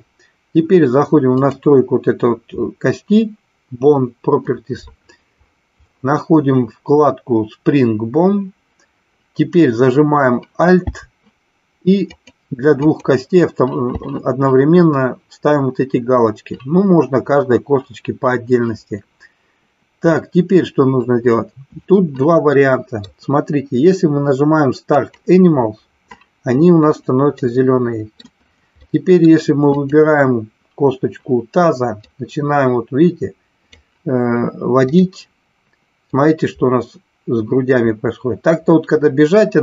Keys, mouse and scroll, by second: 1.3 click, 12.2 alt+click, 12.8 alt+click, 22.4-23.2 middle drag, 25.0 click, 27.3-28.2 middle drag, 28.8 middle click, 29.8-31.3 drag, 32.0-33.8 drag, 34.8 click, 36.0-39.6 drag.